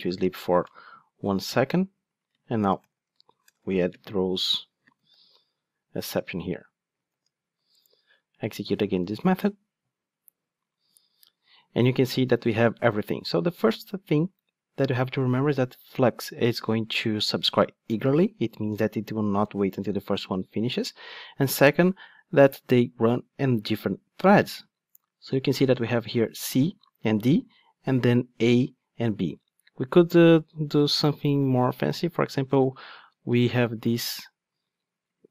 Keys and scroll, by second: 5.6 Return, 7.4 ctrl+shift+d.